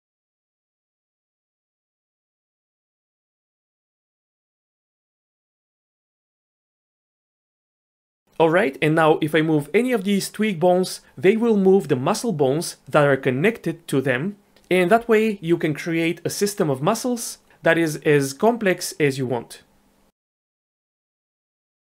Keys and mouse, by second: 2.4 shift+click, 3.0 shift+click, 3.3 ctrl+shift+c, 4.5 ctrl+shift+c, 6.8 ctrl+shift+c, 7.7 ctrl+shift+c, 9.9 g, 11.2 click, 11.4 click, 11.7 g, 16.8 click, 17.1 g, 18.1 click, 18.2 g, 19.8 g, 20.9 g.